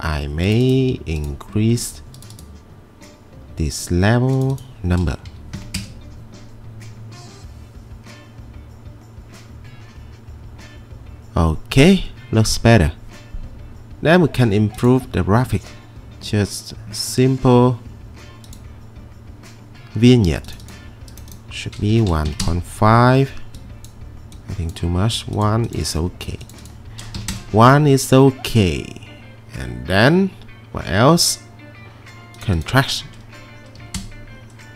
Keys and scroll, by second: 5.3 typing, 6.2 Return, 21.7-22.8 typing, 27.2 typing, 27.3 Return, 33.8 typing, 34.0 Return.